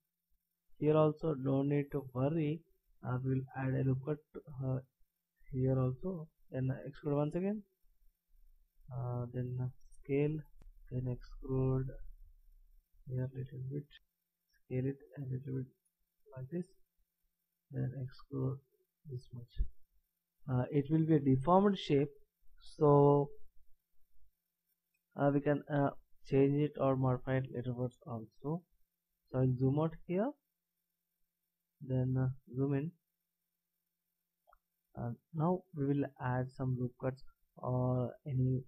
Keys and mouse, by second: 0.2-7.0 drag, 7.0 e, 9.8 s, 10.9 e, 13.0 e, 14.0 ctrl+z, 14.0 e, 14.1 s, 16.9 e, 19.8-29.5 middle drag, 33.2 middle click, 33.5-34.6 middle drag.